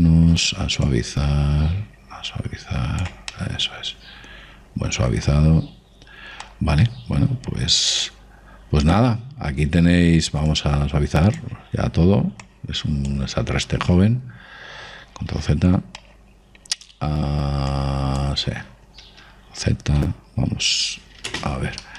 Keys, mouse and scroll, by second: 2.0 click, 4.4-6.2 middle drag, 7.5-9.6 middle drag, 10.0-11.6 middle drag, 11.6 click, 13.6 click, 16.6 ctrl+z, 17.1-18.8 middle drag, 18.8 click.